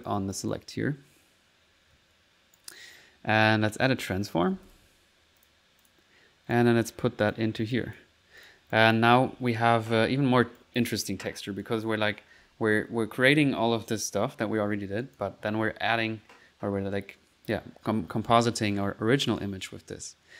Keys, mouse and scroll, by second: 0.4 click, 0.7 typing, 1.1 middle click, 4.1 right click, 4.6 typing, 5.5 click, 5.9 click, 6.6 click, 7.8 click, 8.2-9.5 drag, 9.3 1, 10.2 middle click, 10.6 click, 11.4 middle click, 11.7 click, 12.1-12.5 typing, 13.9 middle click, 13.9 typing, 15.1 click, 15.9 typing.